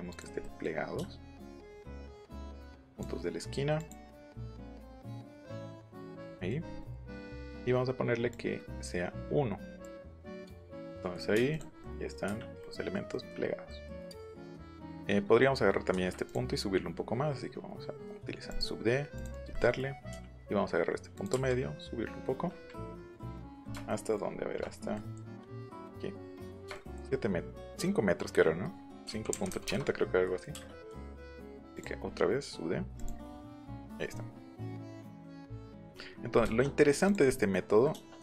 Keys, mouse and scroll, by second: 0.1 shift+click, 1.7 shift+click, 2.9 shift+click, 3.7 shift+click, 4.9 shift+click, 5.9 shift+click, 6.2 middle click, 6.8 middle click, 7.2 middle click, 7.5 middle click, 8.3-9.7 drag, 10.3 click, 10.7 middle click, 11.4 click, 11.8 middle click, 12.6 middle click, 13.0 middle click, 13.2 scroll down 1, 13.6 middle click, 13.9 scroll up 1, 14.2 click, 16.2 click, 18.4 click, 19.1 click, 19.3 click, 19.5 middle click, 21.1 click, 21.3 Up, 23.2 middle click, 23.2 scroll, 24.3 shift+middle click, 24.3-24.6 shift+scroll, 29.0 KP_5, 29.3 KP_Decimal, 29.5 KP_8, 29.6 KP_Enter, 29.8 scroll up 1, 30.2 click, 31.1 click, 31.7 click, 32.9 click, 33.4 middle click, 33.9 click, 34.1 middle click, 37.0 click, 37.2 middle click, 37.8 middle click.